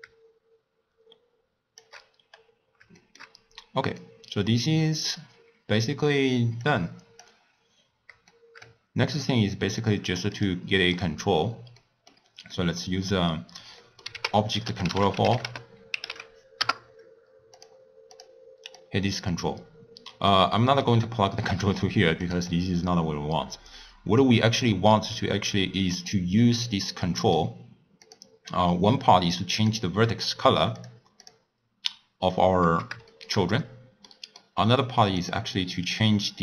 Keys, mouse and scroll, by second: 2.2-2.9 scroll down 5, 2.9 shift+middle click, 3.4-3.9 scroll down 3, 3.9-6.6 middle drag, 6.6 click, 7.5-8.3 scroll down 3, 8.3-9.8 shift+middle drag, 9.8 click, 10.3 click, 10.9 click, 11.8-12.9 middle drag, 12.9 scroll up 1, 13.0-13.8 scroll down 2, 13.8 middle click, 14.1 ctrl+a, 18.1 click, 18.8-20.6 drag, 20.6-22.2 middle drag, 22.2 click, 22.5-24.9 drag, 24.9 middle click, 25.3-26.3 scroll up 1, 26.3-26.8 scroll up 3, 26.8-28.1 middle drag, 28.1 click, 29.5 click, 30.8 click, 31.2 click, 33.1 shift+middle click, 33.4-34.1 scroll up 2, 34.1-35.2 middle drag, 35.2 click.